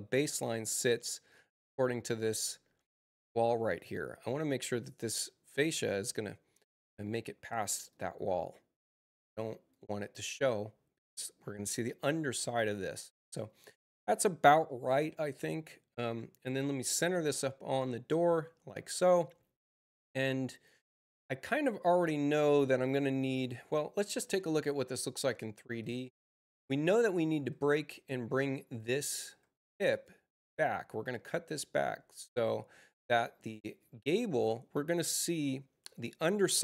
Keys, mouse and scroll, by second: 7.8-9.6 drag, 15.3-17.0 drag, 25.7 click, 27.3 u, 28.2 click, 29.2 u, 29.8 click, 31.5-33.7 drag.